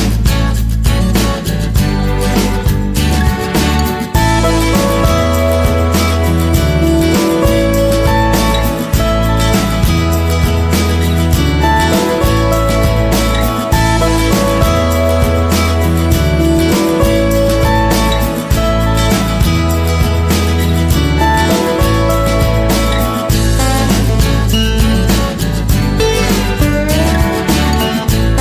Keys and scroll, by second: 3.7 ctrl+=, 13.9 ctrl+0, 18.7 ctrl+c, 19.0 ctrl+v.